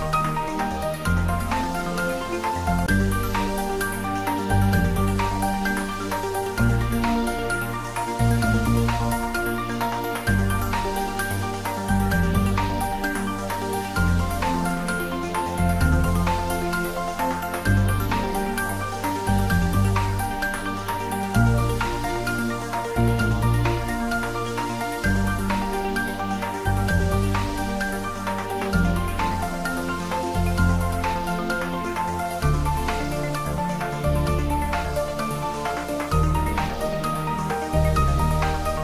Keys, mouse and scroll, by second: 1.5 ctrl+z, 3.7-8.9 shift+drag, 11.7 click, 11.8 click, 14.7 click, 18.8 click, 19.2 ctrl+z, 21.7 shift+click, 21.8 shift+right click, 22.0 shift+click, 25.8 shift+click, 26.1 ctrl+z, 28.6-32.7 shift+drag, 32.7-33.3 scroll down 1, 34.0-36.0 scroll down 1, 38.0 click.